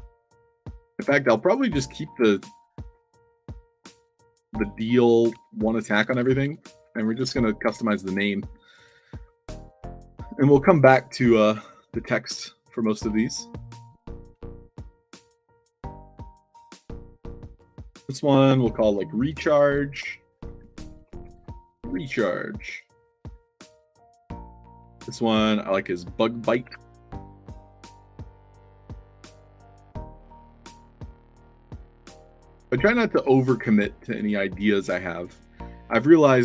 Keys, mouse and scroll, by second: 1.3 1, 6.5-7.5 typing, 8.7 click, 9.4 f, 9.8 alt+drag, 13.4 click, 20.5-22.3 typing, 23.2-23.7 drag, 24.5 click, 25.7 click, 31.4 u, 31.6 space, 32.0 e, 33.7 click, 35.4-36.1 drag.